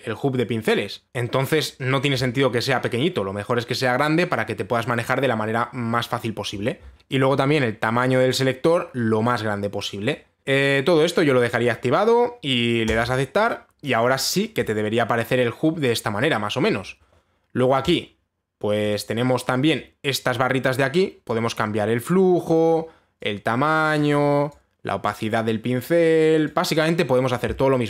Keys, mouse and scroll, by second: 8.7 click, 13.5 click, 14.7 right click, 15.2 right click, 18.5 click, 19.5 click, 23.2 click, 24.6 click, 26.7 click.